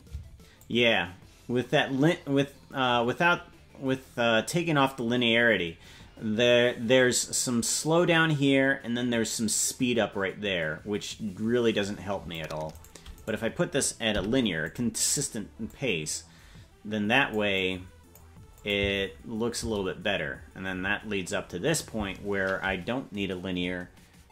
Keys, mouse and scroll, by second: 0.6-12.4 drag, 0.6 space, 12.7 right click, 13.5 right click, 14.1 t, 15.7-17.4 drag, 17.6 click, 18.5 click, 18.8 space, 19.6 space.